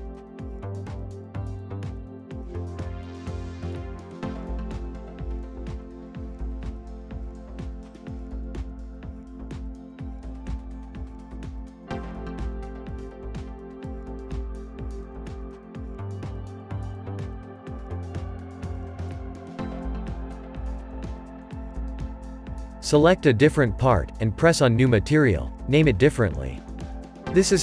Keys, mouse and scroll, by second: 4.1-11.6 shift+middle drag, 12.6 scroll up 2, 15.5-17.9 scroll down 1, 19.4-22.2 middle drag, 22.2 click, 23.7-24.3 scroll up 2, 24.3-26.0 middle drag, 26.0-27.6 drag.